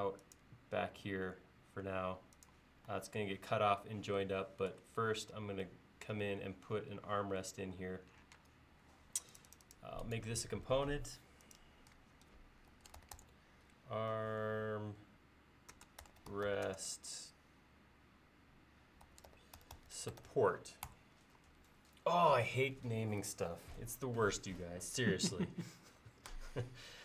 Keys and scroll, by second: 8.4 space, 12.5-13.7 typing, 15.8-17.0 typing, 18.9-20.9 typing.